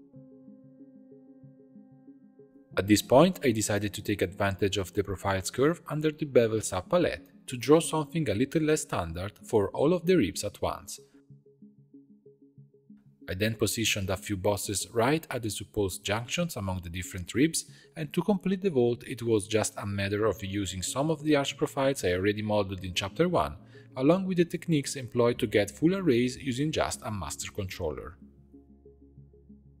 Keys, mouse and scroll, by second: 0.0 click, 0.6 shift+click, 1.5 ctrl+j, 2.5-4.3 shift+drag, 4.8-6.2 scroll down 12, 6.2-12.9 drag, 12.9 right click, 13.6-15.2 shift+drag, 15.8 click, 16.7 g, 21.0-23.0 middle drag, 23.0-23.5 scroll up 4, 23.5 middle click, 26.0-28.1 drag, 28.4-29.8 shift+middle drag.